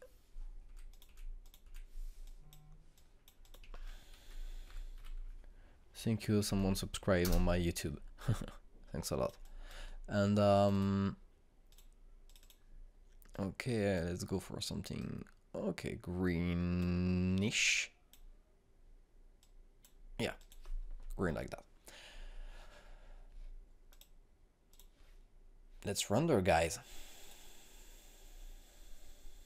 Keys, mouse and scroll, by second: 1.6 Delete, 1.8 click, 2.0 Delete, 2.4 click, 2.6 Delete, 3.2 click, 4.7 ctrl+space, 4.9-6.4 typing, 7.4 Up, 8.2 Return, 9.1-21.3 drag, 24.8 click, 28.1 click.